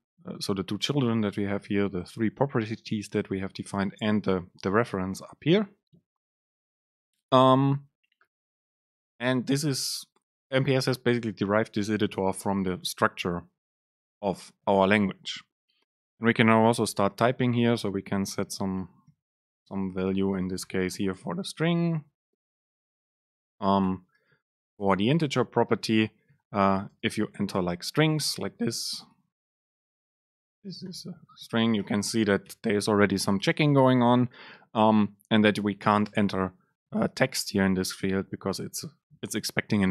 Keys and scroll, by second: 19.0 BackSpace, 33.7 Up, 34.0 Down, 35.6 Down.